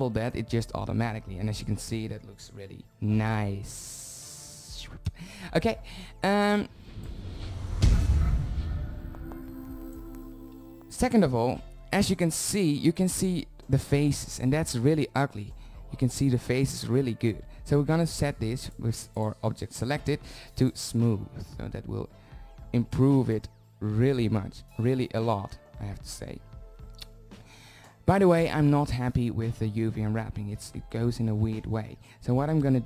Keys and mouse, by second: 14.3 z, 14.7 z, 18.1-20.2 drag, 21.5 shift+z, 28.3-29.8 middle drag.